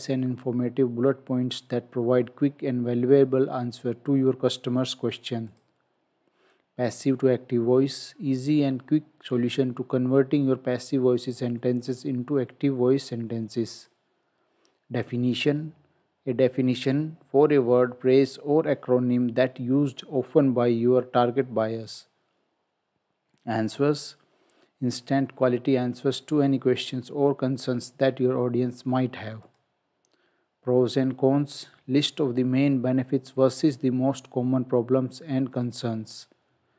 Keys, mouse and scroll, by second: 5.5 click, 13.8 click, 21.9 click, 29.5 click, 35.7 click.